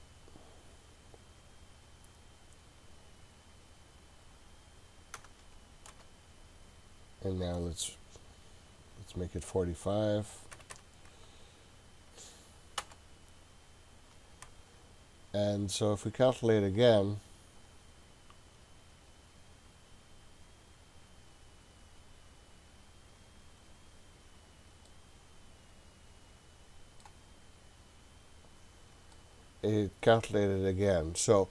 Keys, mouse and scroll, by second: 0.7-3.1 scroll down 2, 3.1-3.9 scroll down 1, 3.9-6.6 drag, 9.1-14.7 drag, 16.8 click, 24.9-27.0 middle drag, 28.2 click, 29.1-31.5 middle drag.